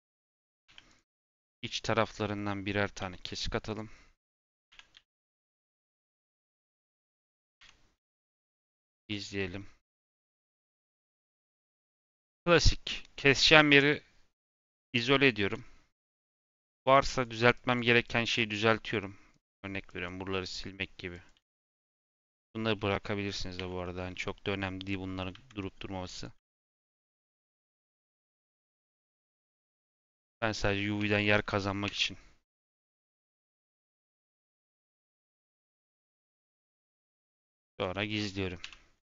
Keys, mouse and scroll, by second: 0.6 2, 0.8 click, 1.4 click, 2.1-3.6 middle drag, 3.6 click, 4.1 click, 4.6 a, 4.9 u, 5.8 3, 6.0 click, 6.9 middle click, 7.5 Tab, 7.9 /, 8.6 h, 9.0 click, 10.1 m, 13.6 /, 14.7-15.0 scroll down 2, 15.0 middle click, 15.3 Tab, 15.8 3, 16.2-17.5 drag, 18.6 click, 19.8 click, 20.4 click, 21.1 click, 21.5 x, 22.7 middle click, 23.5 2, 23.7-24.8 middle drag, 24.8 click, 25.5 middle click, 26.1 click, 26.6 middle click, 27.3 click, 27.9-29.0 middle drag, 29.0 click, 29.5 a, 29.8 u, 30.9 Tab, 31.8 Tab, 33.2 middle click, 33.6 Tab, 33.9 scroll up 2, 34.6-35.5 middle drag, 35.5 Tab, 35.6 middle click, 36.2 /, 38.0 click, 38.5 /, 38.9 Tab.